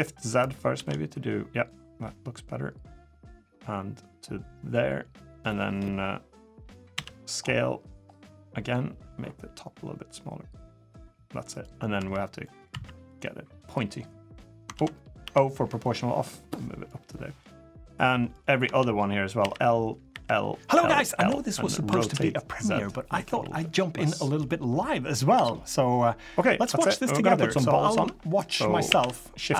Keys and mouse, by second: 6.7 s, 11.7 3, 12.2 drag, 12.5 1, 13.6 click, 14.5 ctrl+z, 15.0 o, 15.6-16.6 drag, 16.9 click, 19.2-21.7 typing, 24.8 middle click, 25.1 Tab, 25.4-26.0 middle drag, 26.4 Tab, 26.6 drag, 27.7 Tab, 28.6 shift+a.